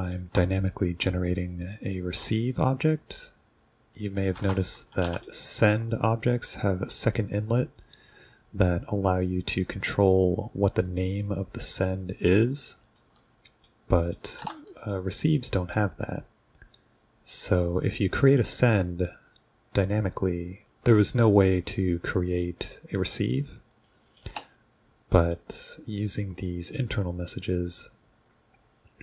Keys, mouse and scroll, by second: 0.1 ctrl+click, 4.2 click, 4.6 drag, 5.0 s, 5.2 click, 13.0-13.7 drag, 14.1 click, 14.3 BackSpace, 14.4 r, 14.8 click, 23.9 drag, 24.3 BackSpace, 25.2 click.